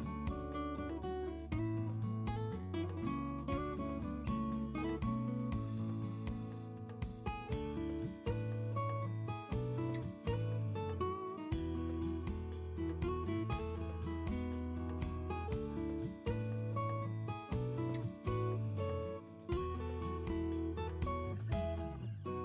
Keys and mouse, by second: 17.2-19.5 drag, 22.3 Tab.